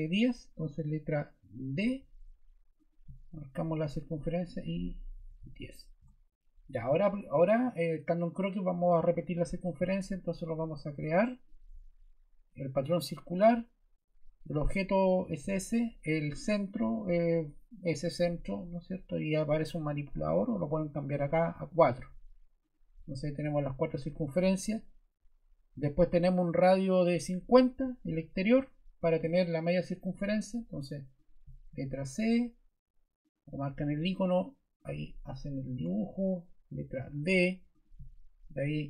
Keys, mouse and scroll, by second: 1.7 a, 4.9-5.9 typing, 7.2 ⟲, 35.7 ↺, 37.0 d.